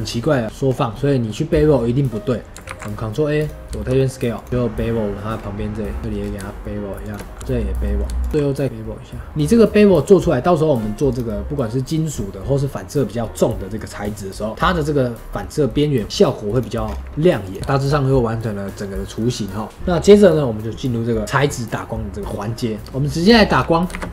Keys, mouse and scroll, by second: 0.6 scroll down 1, 0.8-4.3 middle drag, 4.5 ctrl+b, 6.0 middle click, 6.1-6.9 scroll down 1, 6.9 shift+click, 7.4 middle click, 8.3 q, 16.8-17.3 scroll down 2, 16.8-17.3 middle drag, 17.3 click, 17.7-22.8 shift+middle drag, 22.8 click, 23.4-23.8 drag, 23.8 shift+a.